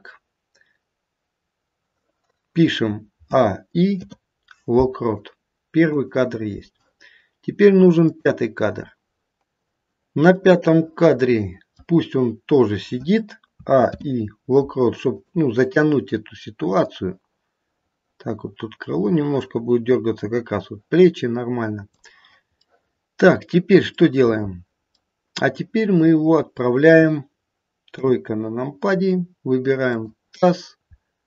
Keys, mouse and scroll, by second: 3.3 a, 3.9 i, 8.0 click, 10.2 middle click, 11.6 middle click, 13.5 a, 13.7 i, 16.9 click, 22.6 middle click, 25.0 middle click, 27.9 KP_3, 28.9-29.8 scroll up 2, 29.8 click, 30.6-31.2 scroll down 3.